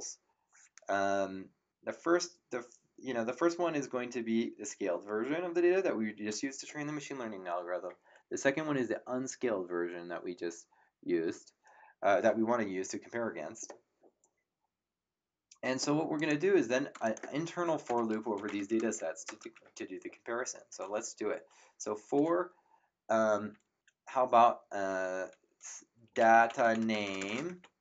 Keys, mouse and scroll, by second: 16.1 click, 17.8 Return, 17.8 KP_Enter, 18.1-19.2 typing, 25.8-27.8 typing.